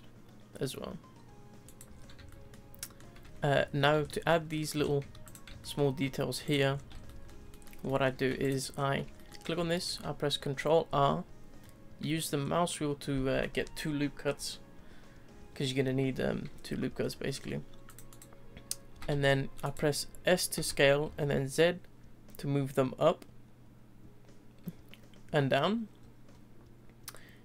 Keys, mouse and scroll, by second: 1.9-2.3 scroll down 3, 2.3-3.2 shift+middle drag, 3.2 Tab, 3.6 Tab, 3.8 scroll down 1, 4.1 shift+middle click, 4.8 scroll up 4, 5.0 Tab, 5.2 click, 5.6 shift+middle click, 6.4 click, 6.7-7.0 scroll down 1, 7.0-8.4 shift+middle drag, 8.4 click, 8.7-9.1 scroll up 2, 9.1-9.6 shift+middle drag, 9.6 Tab, 10.9 ctrl+r, 18.9 s, 20.6 s.